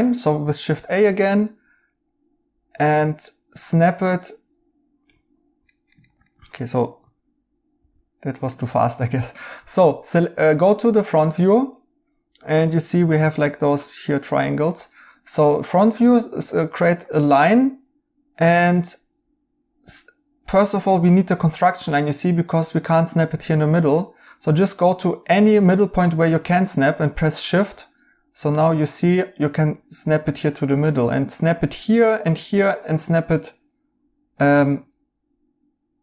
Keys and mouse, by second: 5.1 Escape, 5.6 right click, 7.7 alt+z, 8.5 right click.